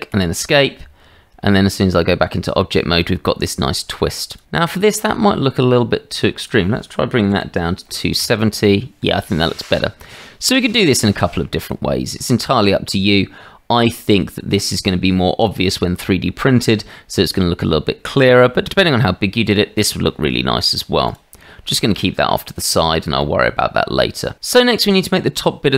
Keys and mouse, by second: 1.1 Tab, 6.4-9.0 drag, 9.6 click, 10.4-11.6 middle drag, 11.9 shift+middle drag, 12.5-14.1 middle drag, 15.1-16.0 middle drag, 17.4-18.2 drag, 18.6 shift+drag, 21.0 click, 22.0-22.3 shift+drag, 23.2-23.5 shift+drag, 23.5 middle click.